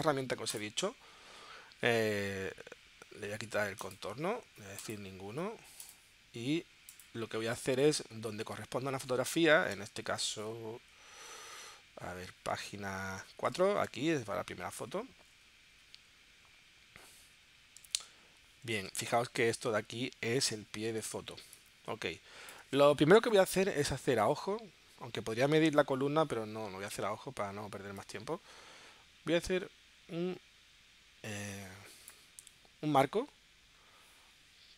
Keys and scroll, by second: 9.0 super+Tab, 14.0 super+Tab, 18.4 super+Tab, 18.8 super+Tab, 21.4 space.